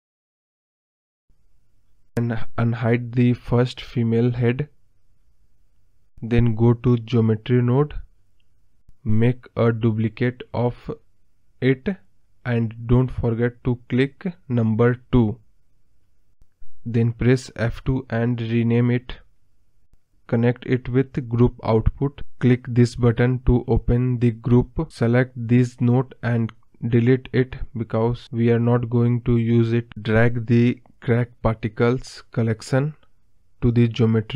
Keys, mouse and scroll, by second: 1.0 click, 2.0 click, 6.3 click, 6.7 scroll up 3, 6.9-7.5 scroll down 4, 7.5 click, 8.2 click, 8.9 click, 11.8 shift+d, 15.6-23.9 drag, 23.9 ctrl+z, 26.7 Delete, 31.2 click.